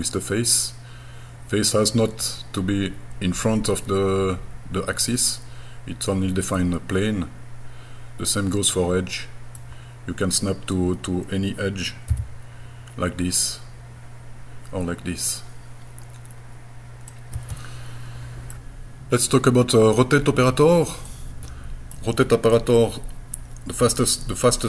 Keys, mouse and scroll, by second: 3.8-9.6 middle drag, 12.1 e, 17.1-19.7 middle drag, 19.7-20.1 scroll down 1, 20.3-21.0 scroll up 2, 21.1 middle click.